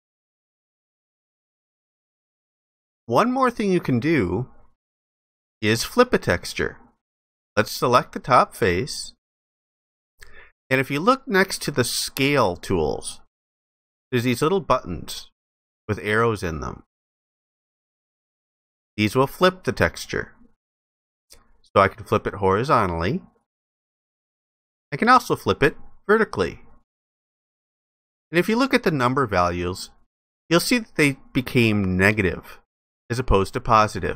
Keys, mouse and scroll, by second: 0.5 alt+click.